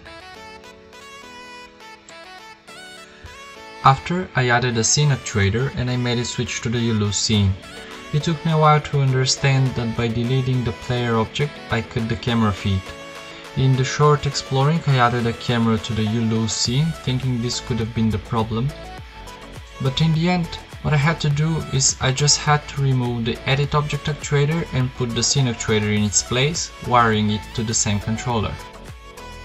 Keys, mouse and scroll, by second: 2.8 right click, 5.3-7.5 drag, 7.5 click, 8.2 KP_0, 8.5 p, 11.6 shift+a, 12.4 alt+r, 12.6 g, 13.0 KP_0, 14.0 click, 15.7 p, 17.9 middle click, 18.4 p, 21.6 right click, 22.3-23.9 right drag, 23.9 click, 24.4 right click, 26.6-27.6 right drag, 29.3 right click.